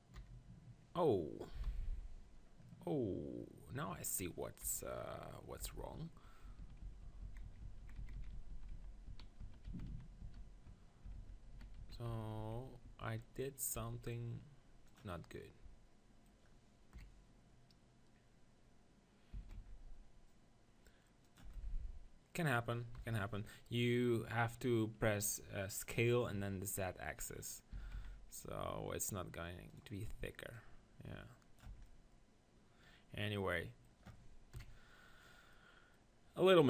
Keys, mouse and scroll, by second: 0.2 KP_7, 1.7 KP_1, 2.7-4.6 middle drag, 4.6 KP_1, 5.6 Tab, 6.4-8.2 middle drag, 6.6-7.0 ctrl+z, 7.2 ctrl+z, 7.4-8.5 ctrl+z, 8.9 ctrl+z, 9.1 ctrl+z, 9.4 ctrl+z, 10.2 ctrl+z, 11.2 ctrl+z, 11.5 ctrl+z, 11.8 ctrl+z, 12.4 ctrl+z, 13.8 r, 15.0-16.9 drag, 16.9 middle click, 17.1 KP_1, 19.3 s, 21.4-23.1 drag, 23.1 KP_1, 27.7-29.7 middle drag, 27.7 s, 29.8-32.3 drag, 31.7 Tab, 31.9-32.9 middle drag, 34.5 KP_1.